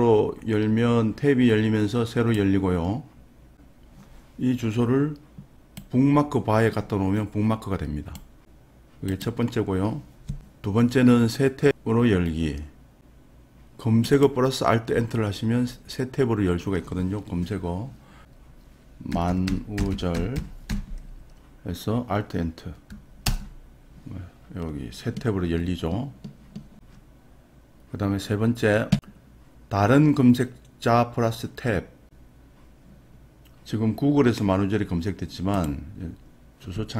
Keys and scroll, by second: 18.3 BackSpace, 32.0 Tab.